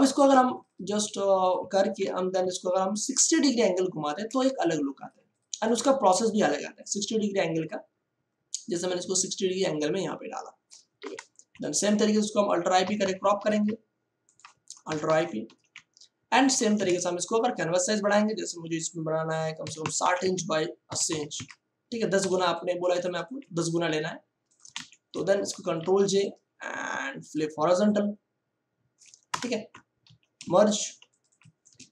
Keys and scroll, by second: 1.9 ctrl+t, 4.3 space, 10.9 Return, 12.7 alt+i, 12.9 alt+p, 13.3 ctrl+d, 14.8 alt+i, 15.0 alt+p, 15.4 ctrl+d, 16.7 ctrl+alt+c, 19.5 6, 19.7 0, 20.8 8, 21.1 0, 21.3 Return, 22.3 ctrl+space, 24.7 v, 25.5 ctrl+j, 25.7 ctrl+t, 27.3 ctrl+t, 29.3 Return, 30.0 ctrl+e, 30.4 ctrl+space.